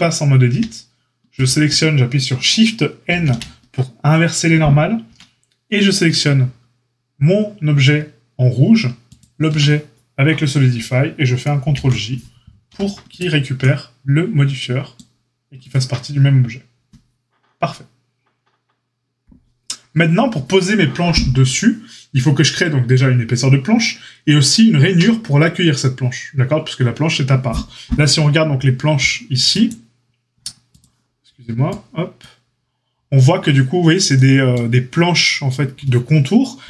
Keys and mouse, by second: 0.5 a, 3.0 shift+n, 5.0 Tab, 11.6 ctrl+j, 12.6 a, 15.5 click, 15.6-30.1 middle drag, 30.8-36.6 middle drag.